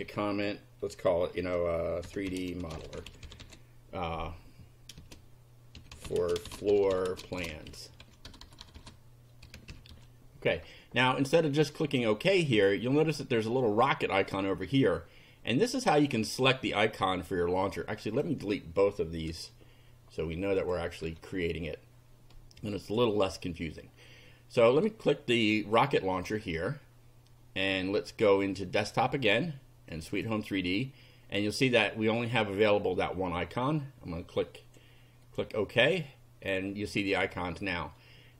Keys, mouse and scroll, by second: 1.8-3.9 typing, 5.0-10.4 typing, 12.3 click, 15.8 click, 18.1 click, 19.3 Delete, 20.6 click, 21.0 Delete, 22.8 click, 25.6 click, 28.8 click, 30.0 click, 32.2 click, 34.4 click, 35.2 click.